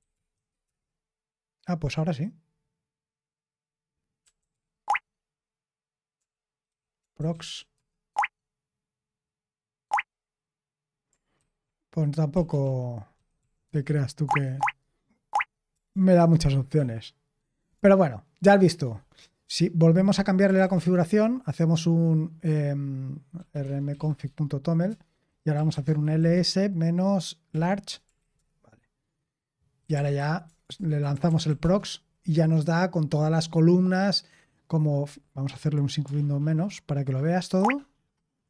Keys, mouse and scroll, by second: 0.0-0.3 typing, 0.6 Return, 3.9-4.9 typing, 6.1-7.8 typing, 8.0 Tab, 9.8 Tab, 11.3 ctrl+c, 12.0-14.3 typing, 14.5 Tab, 15.2 Tab, 15.6-18.7 typing, 20.1-21.0 typing, 23.0-27.4 typing, 24.8 Return, 28.0 Right, 28.3 Return, 29.5-31.9 typing, 37.5 shift+super+-.